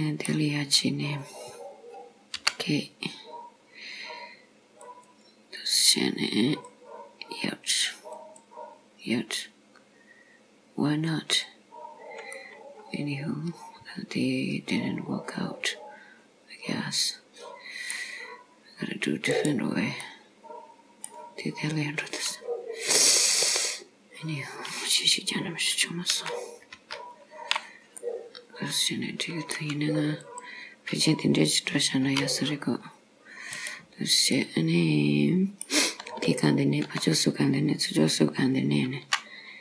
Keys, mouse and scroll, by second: 0.8 click, 2.4 k, 12.4 middle click, 20.0 middle click, 21.2 scroll down 1, 23.5 click, 26.2 ctrl+z, 26.8 ctrl+z, 28.1 middle click, 30.3 click, 32.1 c, 34.4 middle click, 36.3 shift+click.